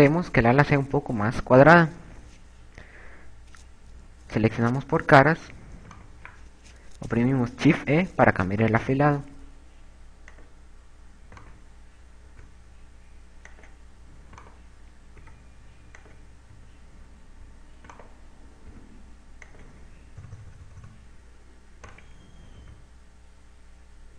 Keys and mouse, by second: 3.7 click, 6.9 right click, 7.8 shift+e, 11.5 click, 12.1 right click, 12.6 shift+e, 14.7 click, 15.4 right click, 16.0 shift+e, 17.2 click, 19.1 right click, 20.7 click, 21.2 KP_6, 21.4 KP_6, 21.6 KP_6, 21.8 KP_6, 22.8 right click, 23.7 e.